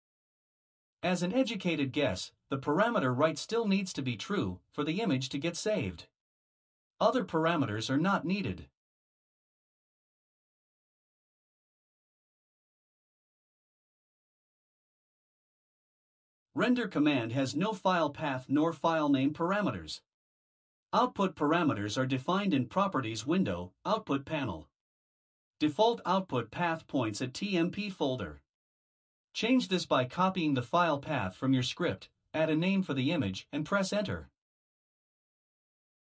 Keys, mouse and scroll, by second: 0.1 Tab, 2.7 click, 6.4 ctrl+c, 8.6 click, 10.2 click, 14.4 ctrl+v, 20.6 click, 24.4 click, 30.2 click, 31.6 click, 34.7 ctrl+c.